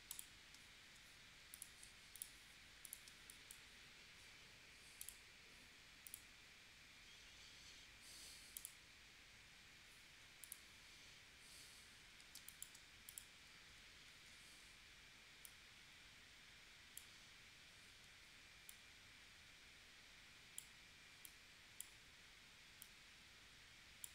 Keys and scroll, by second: 0.5 space, 3.1 space, 12.3 space, 14.1 shift+w.